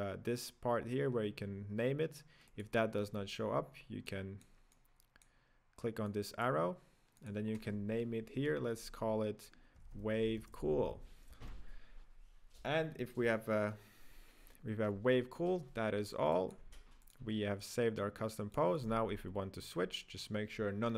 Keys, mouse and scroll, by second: 2.5-4.2 drag, 4.7-10.3 drag, 10.8 o, 13.4 typing, 16.4 click, 17.1-19.1 drag, 19.1 right click, 19.3-19.8 scroll up 2, 19.8 scroll down 2.